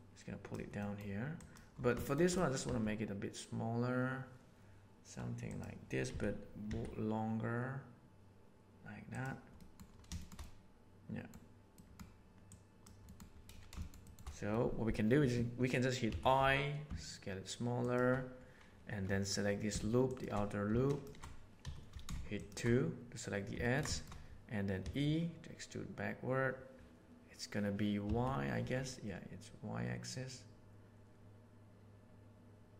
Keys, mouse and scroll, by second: 0.7 middle click, 1.3 click, 1.9 shift+middle click, 2.2 shift+middle click, 2.6 s, 6.0 s, 9.5 middle click, 10.1 shift+middle click, 10.3 middle click, 11.7 middle click, 12.4 click, 13.0 middle click, 13.7 shift+middle click, 14.0 shift+middle click, 20.8 alt+shift+click, 21.5 2, 23.5 ctrl+middle click, 23.9 shift+middle click, 24.7 e.